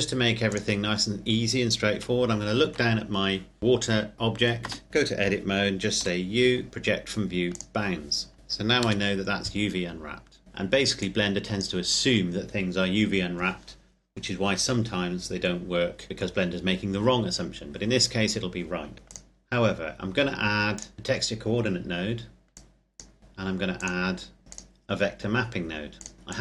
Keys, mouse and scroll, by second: 1.9 KP_7, 2.8-3.6 scroll down 1, 3.6 shift+click, 4.1 shift+middle click, 4.6 Tab, 6.0 u, 7.5 click, 8.3 Tab, 8.8 KP_0, 10.4 click, 15.4-16.2 scroll up 1, 17.3-18.9 scroll down 1, 19.1 click, 24.6 click.